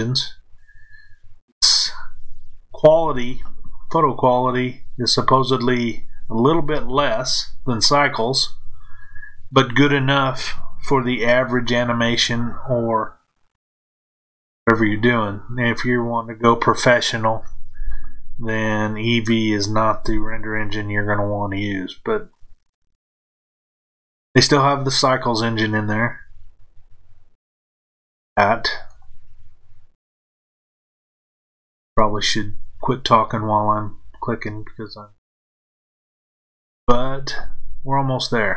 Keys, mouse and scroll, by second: 28.9 shift+click, 31.2 f, 33.1 click, 34.9 shift+click, 36.7 f.